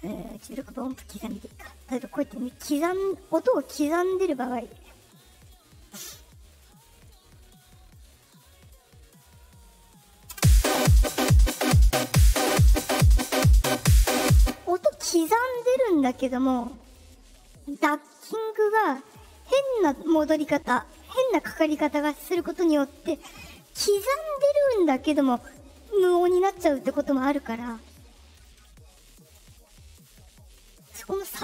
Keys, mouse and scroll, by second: 0.2 click, 1.7 right click, 3.4 right click, 4.4 right click, 5.2 right click, 6.5 right click, 7.6 right click, 9.3 right click, 9.9 right click, 10.2 space, 14.3 space, 16.5 click, 19.0 click, 20.3 click, 21.0 click, 22.3 click, 28.3 click, 29.2 click, 30.0 click, 30.3 click.